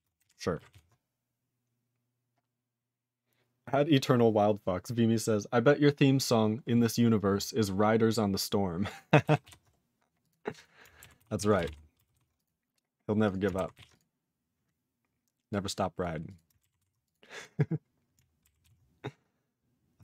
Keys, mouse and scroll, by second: 0.1 ctrl+g, 0.2 ctrl+e, 0.8 ctrl+s, 8.5 scroll down 1, 8.8 click, 8.9 click, 9.4 ctrl+s, 9.7-10.2 scroll down 3, 10.2 click, 10.3 click, 10.5 click, 10.6 click, 11.2 ctrl+s, 11.4 ctrl+a, 11.5 ctrl+space, 11.6 ctrl+g, 12.1 ctrl+s, 12.3 click, 12.4 click, 12.7 scroll down 1, 12.8 scroll up 4, 13.2 click, 13.3 click, 13.7 ctrl+s, 13.9 click, 13.9 click, 14.2-14.8 scroll down 3, 15.5 click, 16.0 click, 16.2 click, 16.3 click, 16.8 ctrl+s, 17.0 click, 17.1 click, 17.3 click, 17.4 click, 17.6 scroll down 3, 18.6 ctrl+s, 19.2 scroll down 1.